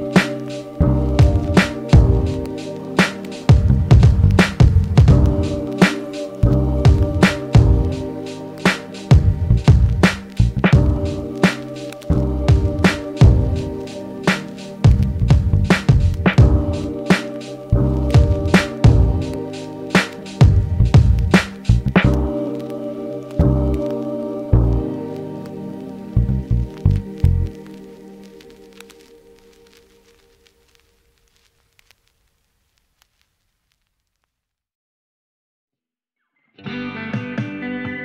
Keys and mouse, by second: 9.9 g, 11.3 g, 12.3 f, 13.0-17.0 middle drag, 17.0-34.2 drag, 33.1 ctrl+z, 33.6 f, 34.2 middle click, 34.6-38.0 shift+drag.